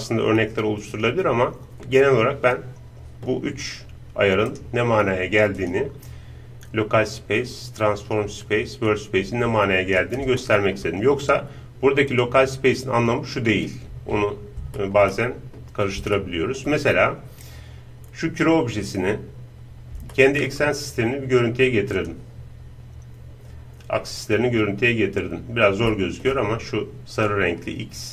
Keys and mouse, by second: 2.4-4.5 middle drag, 4.5-6.3 right drag, 5.6-7.3 drag, 10.4-12.1 middle drag, 12.1-13.8 drag, 14.8-22.0 middle drag, 22.0-26.0 drag, 22.7-27.9 middle drag.